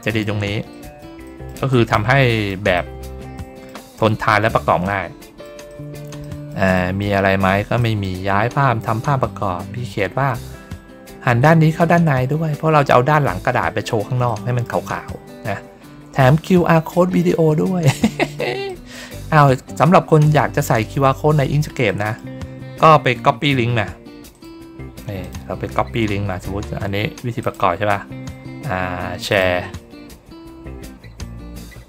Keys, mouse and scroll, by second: 0.6 middle click, 1.1 middle click, 1.6 middle click, 2.1 middle click, 2.6 middle click, 3.2 middle click, 3.9 middle click, 4.7 middle click, 5.6 middle click, 6.1 middle click, 6.6 middle click, 7.7 middle click, 8.7 ctrl+scroll up 1, 9.5 ctrl+scroll down 1, 9.9 ctrl+middle click, 11.8 ctrl+middle click, 12.2 ctrl+middle click, 14.2 middle click, 14.9 middle click, 16.0 ctrl+middle click, 16.2 ctrl+middle click, 16.8 middle click, 18.6 middle click, 19.2 ctrl+scroll down 1, 20.4 ctrl+scroll down 1, 20.9 middle click, 21.8 middle click, 24.2 click, 25.1 click, 27.3 click, 29.2 click.